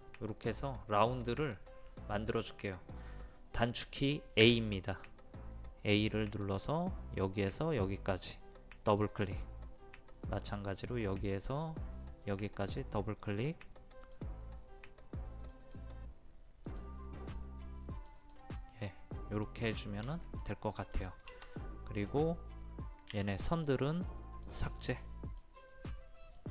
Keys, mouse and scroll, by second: 1.2-2.2 scroll up 1, 4.4 a, 5.9-11.4 drag, 18.7 middle click, 19.8 shift+middle click, 22.7-23.1 scroll up 1, 23.2-24.9 drag.